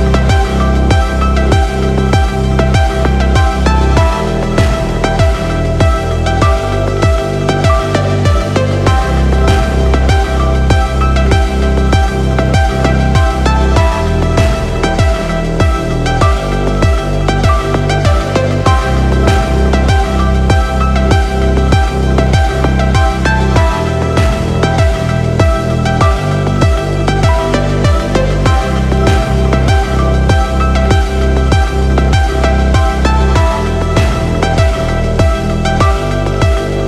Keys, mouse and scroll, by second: 5.9 click, 7.9 g, 9.1 x, 13.4 click, 15.6 i, 18.5 click, 23.4 space, 26.3 click, 26.5 click, 26.7 click, 26.9 click, 27.1 click, 34.6 click.